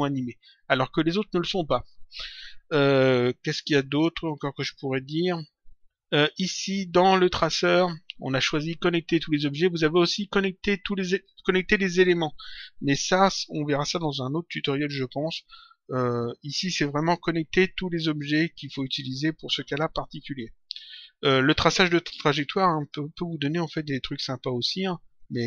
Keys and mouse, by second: 1.7 click, 3.3 click, 7.3 click, 9.3 click, 22.7 click, 23.8 click, 25.1 click.